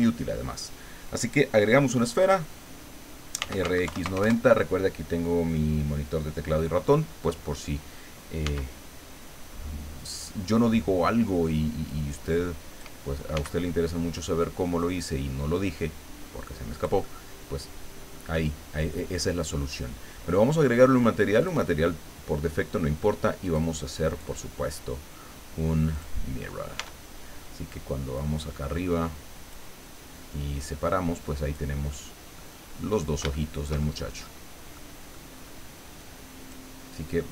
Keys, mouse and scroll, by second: 3.1-4.1 typing, 4.2 KP_Enter, 8.4 s, 10.0 click, 10.6 middle click, 11.9 click, 13.3 s, 16.7-18.3 drag, 21.4 click, 23.4 click, 24.1 click, 25.9 click, 26.8 Tab, 28.1-29.7 drag, 30.1-31.7 drag, 31.9 middle click, 32.6-32.9 scroll up 2, 33.3-34.4 shift+middle drag, 34.7 middle click, 36.0 click, 37.1 click.